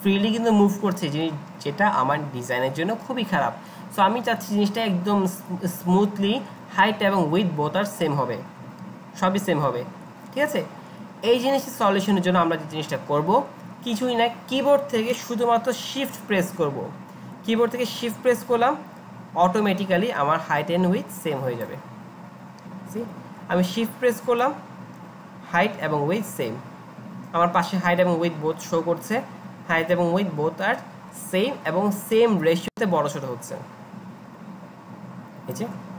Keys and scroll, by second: 23.0 Delete.